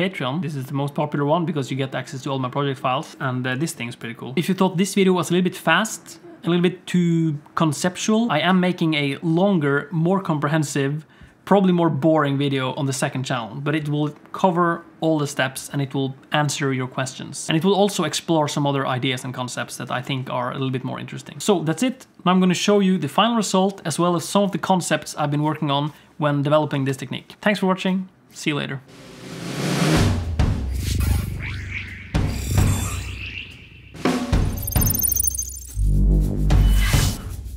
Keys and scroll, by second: 8.3 space, 14.6 space, 14.7 alt+a, 15.2 ctrl+s, 15.2 z, 15.5 z.